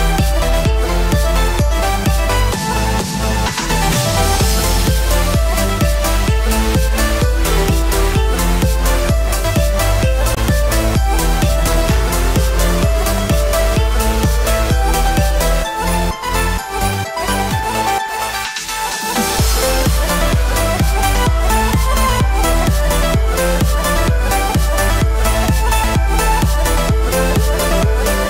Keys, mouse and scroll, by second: 0.7 Tab, 0.8 scroll up 2, 1.0 shift+middle click, 1.4 alt+a, 2.4 l, 4.2 click, 7.5 BackSpace, 10.4 click, 18.4 alt+a, 18.7 Tab, 19.0 alt+a, 19.3-19.9 scroll down 4, 19.5 middle click, 20.0 shift+middle click, 20.3 middle click, 20.8-21.5 scroll up 6, 21.0 shift+middle click, 21.5 shift+middle click, 22.9 Tab, 24.4 l, 26.7 click.